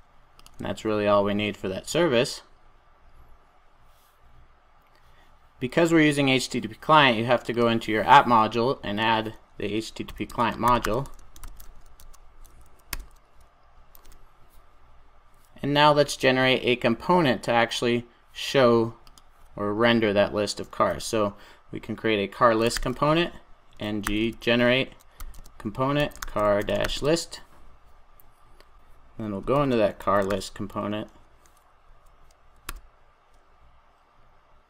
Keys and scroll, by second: 12.9 Return, 13.9 super+s.